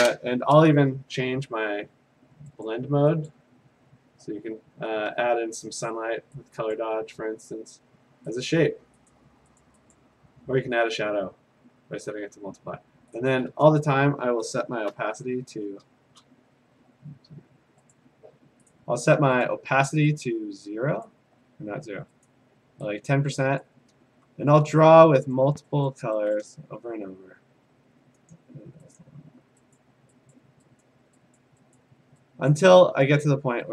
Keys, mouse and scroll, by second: 2.7 click, 3.3 click, 6.8 click, 8.5 click, 9.1 click, 9.6 click, 13.0 click, 13.2 click, 14.9 0, 18.0 click, 18.7 click, 19.8 click, 20.2 click, 21.1 click, 22.3 click, 23.6 click, 24.8 click, 25.4 click, 25.9 click, 26.4 click, 27.5 d, 28.3 click, 29.0 click, 29.8 click, 30.3 click, 31.0 click, 31.4 click, 31.8 click, 32.5 click, 33.1 click.